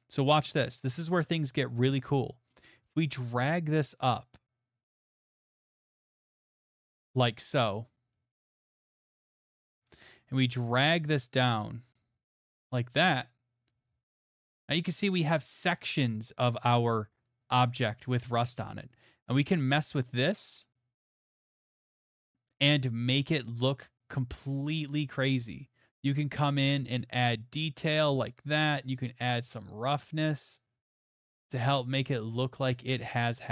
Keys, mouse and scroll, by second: 5.4 click, 5.8 click, 6.9 click, 7.8 click, 9.8 click, 12.4 click, 13.7 click, 13.8 middle click, 13.9 middle click, 13.9 middle click, 14.8 middle click, 14.9 click, 14.9 middle click, 15.0 middle click, 15.0 middle click, 16.0 middle click, 18.1 middle click, 20.9-22.2 middle drag, 24.4-25.7 right drag, 28.0 click, 31.1 click, 31.7 scroll, 32.3-32.9 scroll.